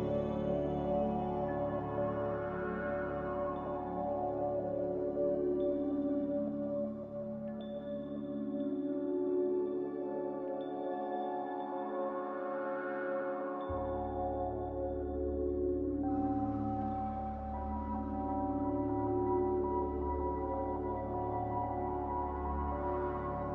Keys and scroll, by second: 1.6 z, 9.8 z, 10.7 x, 15.4-16.3 typing, 18.7-19.5 typing, 21.5 z.